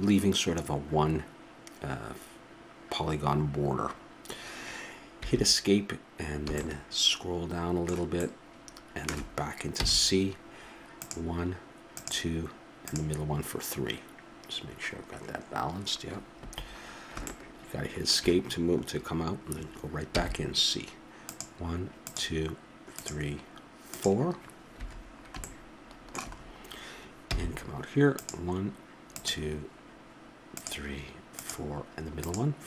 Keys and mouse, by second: 6.5 middle click, 9.3-13.0 middle drag, 9.8 c, 16.8-23.3 middle drag, 20.1 c, 25.0-26.1 middle drag, 26.2 middle click, 27.2 c.